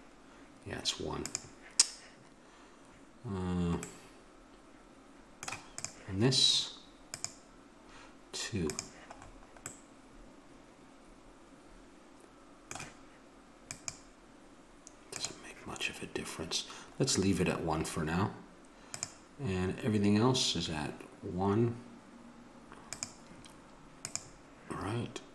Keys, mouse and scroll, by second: 5.9-8.8 drag, 9.3 middle click, 11.6 middle click, 11.9-13.4 middle drag, 13.6-15.7 drag, 18.8-21.1 drag, 22.8-25.3 drag.